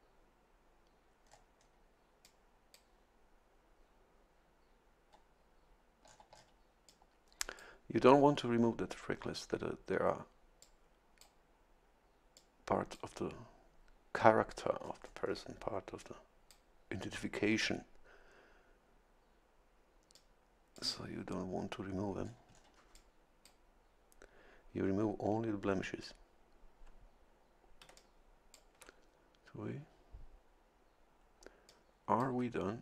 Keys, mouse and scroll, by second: 1.3-1.8 scroll up 2, 2.2 click, 6.0 scroll down 1, 6.9-7.9 drag, 10.6 click, 12.3 click, 14.8-15.5 scroll up 1, 16.0 click, 20.1 click, 22.2 scroll down 1, 22.9 click, 27.8 a, 28.0 click, 31.7 click.